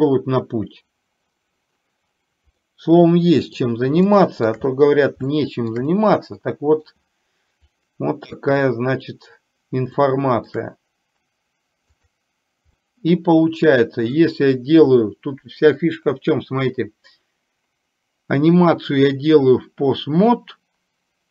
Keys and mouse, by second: 2.7-3.6 middle drag, 4.2 shift+middle click, 5.5 shift+middle click, 6.0-7.0 middle drag, 10.1 shift+middle click, 12.1 click, 13.0-14.2 middle drag.